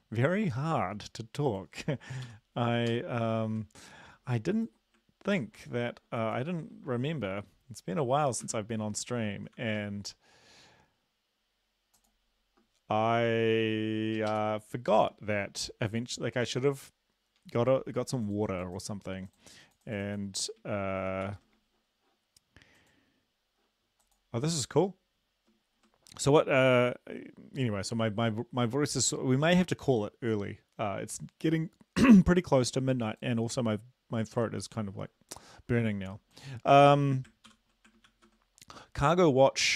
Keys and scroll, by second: 2.3 ctrl+c, 2.9 ctrl+l, 5.4 ctrl+l, 8.4 space, 9.6 ctrl+v, 14.5 super+Left, 21.3 ctrl+c, 37.5 ctrl+l, 38.1 ctrl+v.